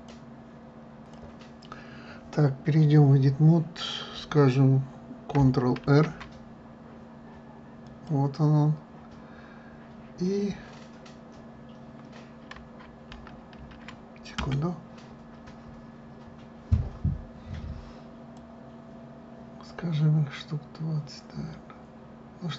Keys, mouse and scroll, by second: 6.0 ctrl+r, 18.5-21.5 drag.